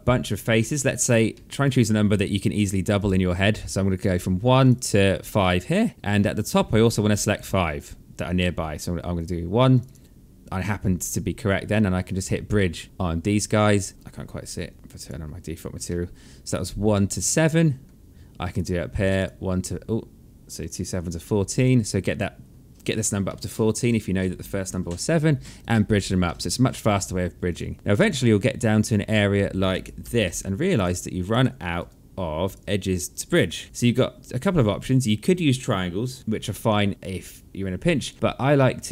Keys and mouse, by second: 0.9 alt+middle click, 1.6 click, 4.2 shift+click, 8.7 shift+click, 12.5 click, 13.0 alt+middle click, 14.7 click, 15.4 alt+middle click, 16.5 alt+middle click, 18.1 shift+click, 20.1 shift+click, 22.8 alt+middle click, 25.1 click, 25.8 alt+middle click, 27.0 click, 27.7 shift+click, 29.6 g, 30.2 click, 30.8 shift+click, 31.4 g, 32.0 click, 32.6 shift+click, 33.3 g, 33.6 alt+middle click.